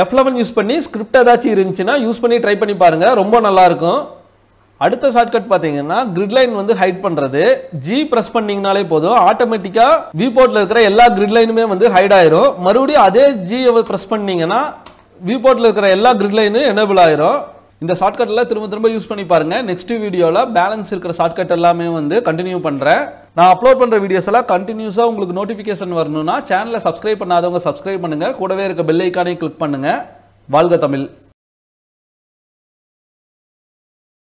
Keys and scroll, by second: 7.7 g, 10.5 g.